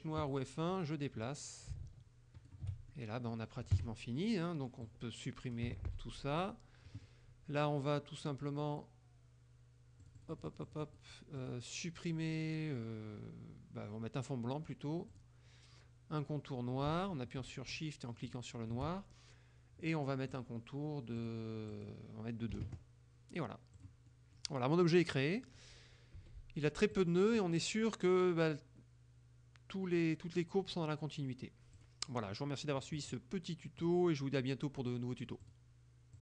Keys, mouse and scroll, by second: 0.3 click, 1.3-2.7 drag, 2.9 ctrl+shift+middle click, 3.3 click, 3.8 KP_Subtract, 4.9 click, 5.7 Delete, 6.5 click, 10.1 click, 11.4 click, 15.2 click, 18.3 shift+click, 20.4 click, 21.3 click, 21.8 click, 22.6 KP_2, 23.8 click, 24.1-24.8 middle drag, 25.0-25.5 middle drag, 25.6 middle click, 26.2 F2, 27.0 click, 27.5 middle click, 27.6 click, 31.8 click, 33.8 click, 35.5 click, 36.2 click.